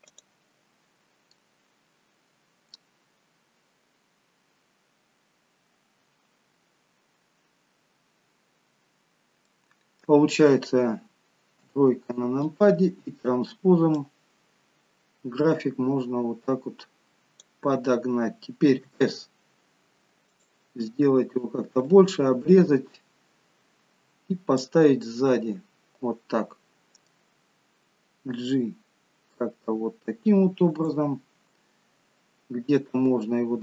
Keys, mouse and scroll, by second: 8.4-9.5 scroll up 3, 9.5 middle click, 11.8 KP_3, 12.9-13.6 scroll down 3, 14.0 click, 18.9 s, 21.0-22.0 scroll down 2, 22.0 click, 22.0-22.7 scroll down 1, 25.2 middle click, 28.5 g.